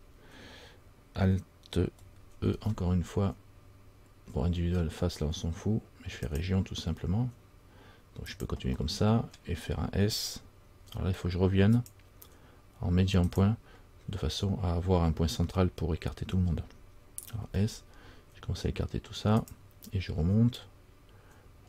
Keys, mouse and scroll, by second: 2.7 alt+e, 11.9 click, 20.8 click.